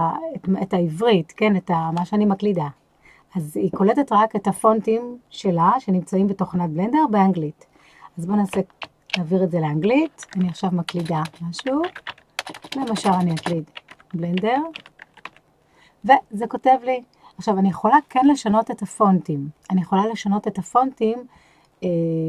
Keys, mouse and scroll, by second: 10.2-15.2 typing.